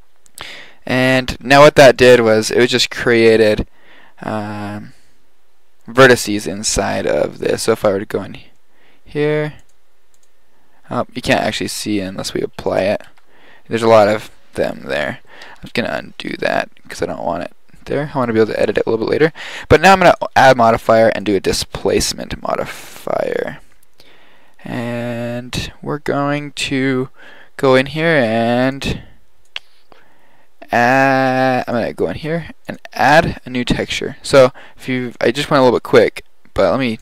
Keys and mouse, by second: 0.0 middle click, 7.8 Tab, 8.6-9.3 middle drag, 12.2 Tab, 12.7 click, 13.3 Tab, 14.7 Tab, 15.8 ctrl+z, 16.6 ctrl+z, 24.4-31.7 drag, 33.1-34.7 drag, 35.1-37.0 drag.